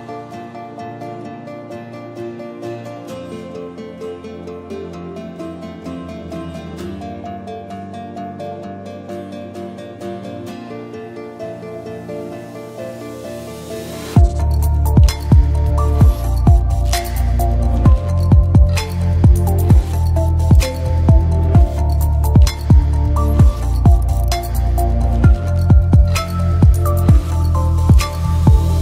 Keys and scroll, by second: 6.0 h.